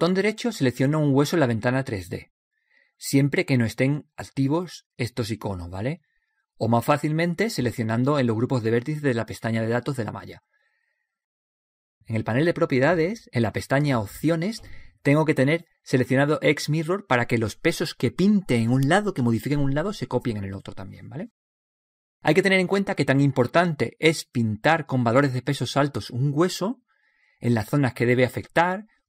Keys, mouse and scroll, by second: 1.9-3.7 right drag, 5.3-8.1 right drag, 9.4-11.3 right drag, 10.7-12.5 drag, 16.0-17.9 drag, 25.7-28.7 drag.